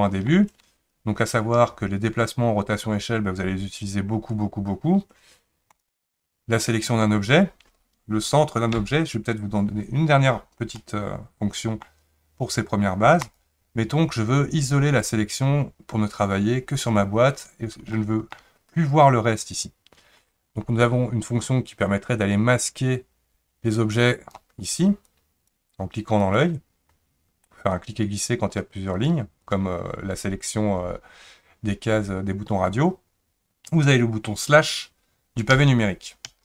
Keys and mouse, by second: 8.8 KP_Decimal, 10.8-11.8 middle drag, 17.9-18.4 shift+middle drag, 22.2 click, 23.8-26.5 drag, 27.7-29.1 drag, 29.4 click, 35.5 KP_Divide, 36.3 KP_Divide.